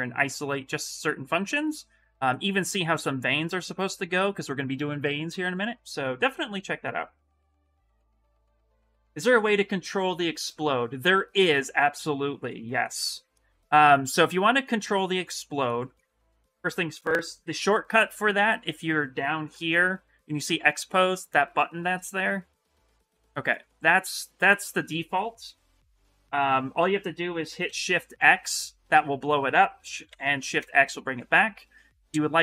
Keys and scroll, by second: 19.2 shift+m, 26.3 shift+m, 27.4 shift+x, 29.8 shift+x.